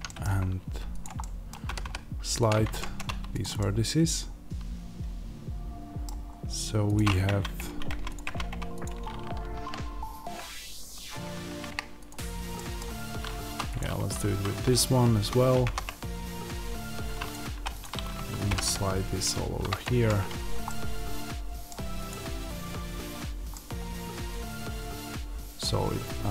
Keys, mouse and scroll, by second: 0.9 click, 1.0-2.3 middle drag, 1.5 g, 2.3 click, 2.5 Tab, 2.8-3.4 scroll down 2, 3.4-6.8 middle drag, 6.2-6.8 scroll up 2, 6.8 click, 7.1 Tab, 8.0 click, 8.1 Tab, 8.7 click, 12.4-13.6 middle drag, 13.3 2, 13.6-15.5 drag, 15.5 ctrl+b, 17.4 1, 17.6 click, 18.4 g, 19.7 click, 19.8 Tab, 20.1 scroll down 1, 20.5-22.0 middle drag, 22.0 click, 23.4-26.3 middle drag, 25.5 scroll down 1, 25.7-26.3 scroll up 1.